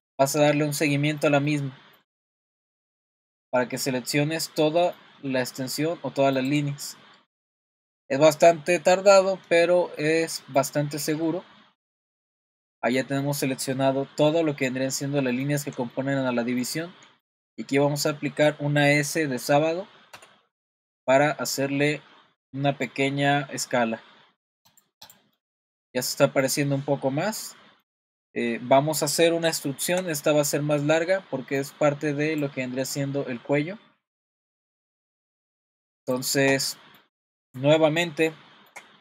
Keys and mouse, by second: 0.0-1.2 middle drag, 1.5 middle click, 2.9 ctrl+click, 3.7 middle click, 4.7 middle click, 6.4 ctrl+click, 6.9 middle click, 7.7 middle click, 10.6 ctrl+click, 11.8 ctrl+click, 12.5 middle click, 13.6 middle click, 15.1 middle click, 15.9 shift+middle click, 16.9 middle click, 17.8 middle click, 20.1 s, 25.0 click, 25.4-26.4 middle drag, 26.7-27.8 middle drag, 29.5 shift+middle click, 36.7-39.0 middle drag.